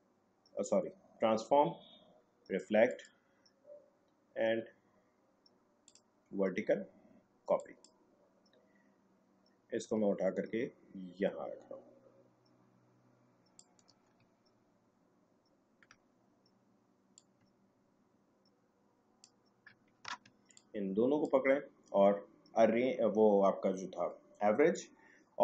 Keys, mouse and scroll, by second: 2.9 click, 5.8 click, 9.9-14.4 drag, 14.4-15.2 alt+scroll up 2, 15.2-17.2 scroll up 2, 17.2-20.0 drag, 20.0 a, 20.6-24.0 drag.